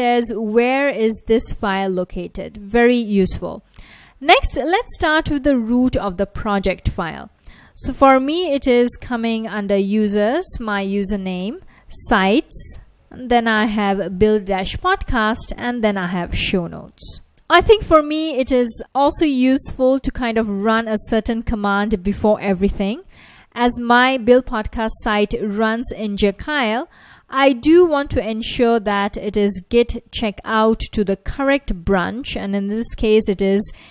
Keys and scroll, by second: 5.2 BackSpace, 5.7 BackSpace, 7.8-13.7 typing, 13.8 Return, 14.8-17.5 typing, 21.0 F1, 25.0-25.4 typing, 28.4-32.5 typing.